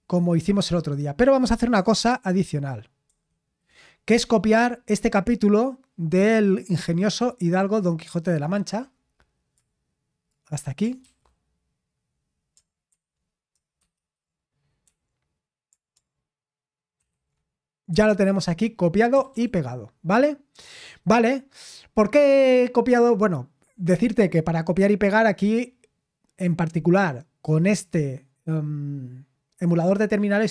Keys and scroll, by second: 2.1 super+8, 3.1 super+7, 11.0 ctrl+c, 12.9 super+7, 13.8 super+8, 14.8 i, 17.0 ctrl+shift+v, 17.9 Escape, 19.1 typing.